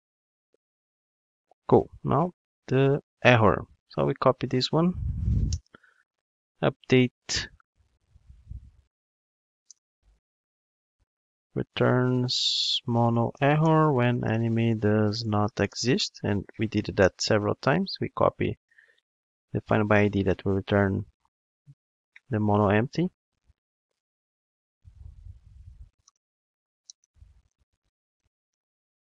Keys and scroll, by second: 4.5 super+c, 5.7 super+v, 19.0 super+c, 21.2 super+v.